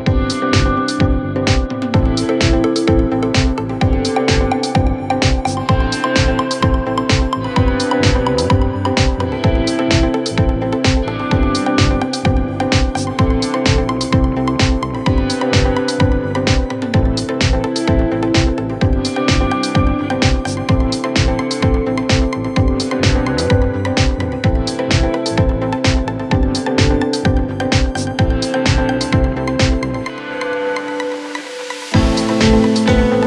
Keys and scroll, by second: 23.3 c, 30.3 Delete.